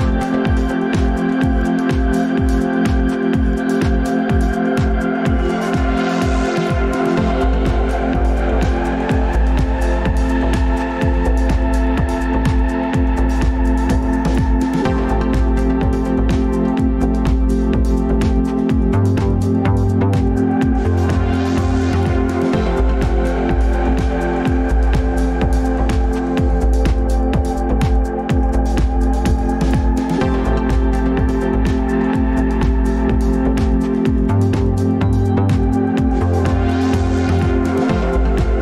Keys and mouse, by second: 18.6 ctrl+z, 19.5 ctrl+shift+z, 20.9 r.